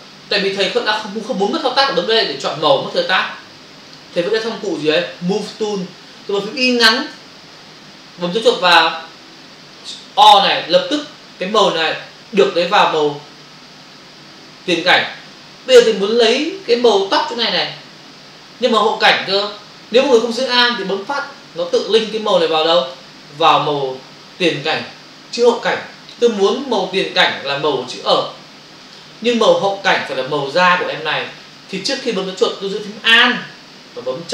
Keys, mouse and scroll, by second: 1.9 click, 3.9 click, 10.2 click, 21.6 click, 22.8 click, 28.8 click.